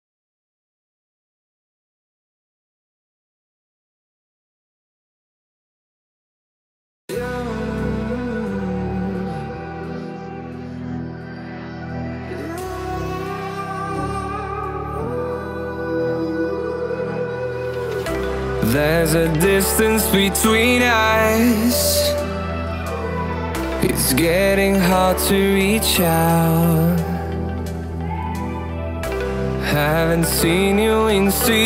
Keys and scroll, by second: 13.9 ctrl+j.